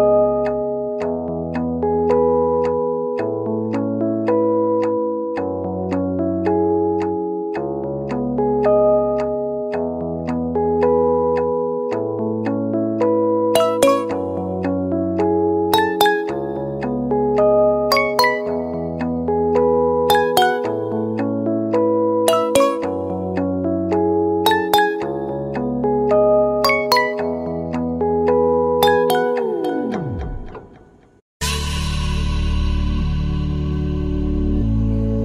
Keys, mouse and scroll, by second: 2.3 super+z.